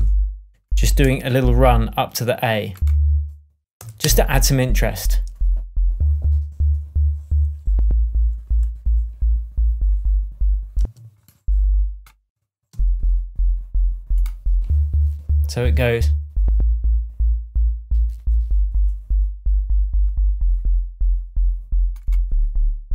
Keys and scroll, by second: 3.7 BackSpace, 4.0 space, 10.7 space, 12.6 space.